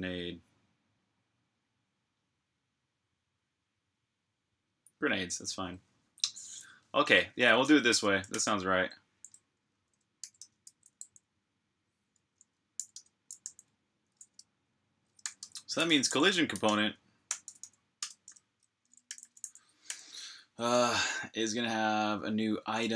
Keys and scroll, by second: 8.2 super+j, 9.3-10.5 typing, 12.5 g, 13.2 super+j, 14.8-19.7 typing, 22.6-22.9 typing.